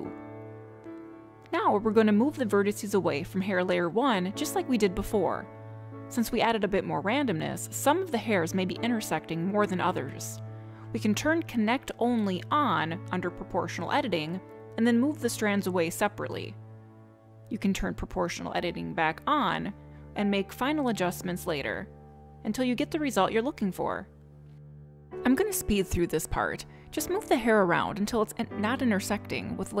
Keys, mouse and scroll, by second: 3.3 middle click, 7.1 click, 7.7 click, 9.1 click, 11.5 click, 12.0 click, 12.8 click, 13.1 scroll up 2, 13.5 shift+middle click, 13.9 scroll down 1, 14.2 middle click, 14.9 click, 19.3 middle click, 20.9 middle click, 23.4 middle click, 24.1 middle click, 25.1 middle click, 25.3 click, 25.4 click, 25.6-29.8 typing, 25.9 click, 25.9 middle click, 26.1 middle click, 26.5 middle click, 26.8 click, 26.8 middle click, 26.9 middle click, 27.3 middle click, 27.4 click, 27.5 click, 27.6 middle click, 27.7 middle click, 27.9 middle click, 27.9 click, 28.1 middle click, 28.2 click, 28.3 middle click, 28.4 click, 28.5 middle click, 28.7 click, 28.9 middle click, 29.0 middle click, 29.2 click, 29.3 click, 29.5 click, 29.6 click, 29.6 click, 29.7 click.